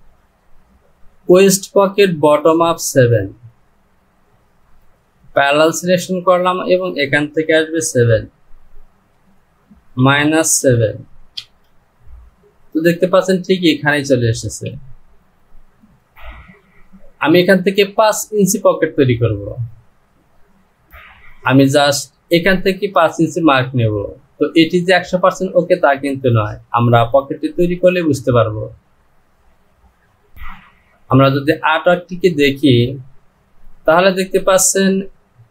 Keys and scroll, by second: 9.5 Down, 14.8 Delete, 30.4 Return.